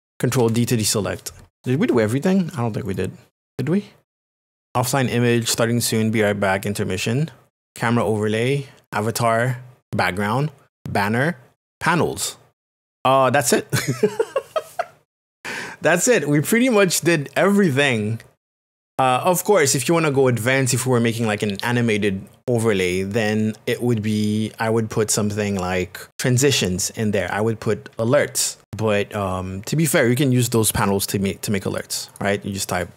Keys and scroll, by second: 0.4 ctrl+d.